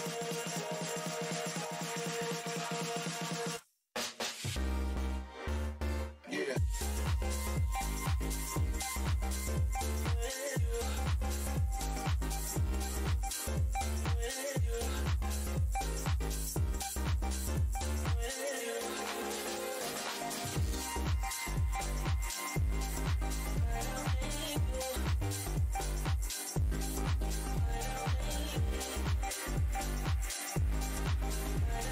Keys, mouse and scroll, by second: 2.3 click, 2.8 ctrl+right click, 4.7 shift+right click, 8.8 alt+c, 9.9 click, 11.3 alt+w, 15.3 space, 16.1 alt+click, 17.7 scroll down 1, 18.6-19.1 scroll up 1, 19.1 Delete, 19.9 right click, 20.2 click, 20.4 alt+scroll down 1, 21.3 click, 22.1 Delete, 24.2 alt+click, 25.6 alt+shift+w, 27.0 alt+click, 29.5 alt+click.